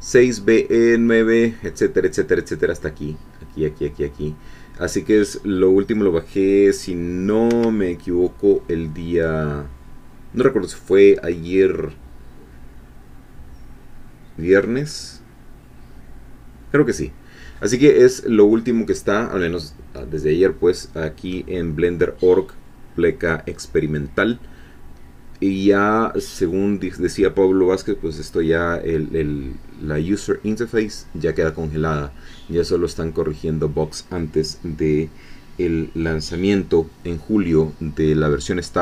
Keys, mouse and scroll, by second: 7.5 Escape.